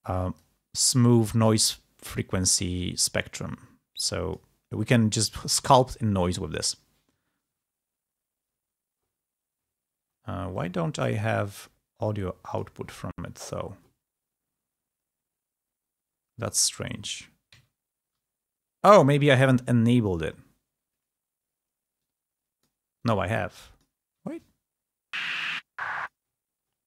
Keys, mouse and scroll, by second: 2.3-4.5 drag, 10.5 click, 12.6 click, 17.4 alt+Tab, 20.9 click, 21.9 click, 23.0-24.1 drag, 25.1-26.2 drag.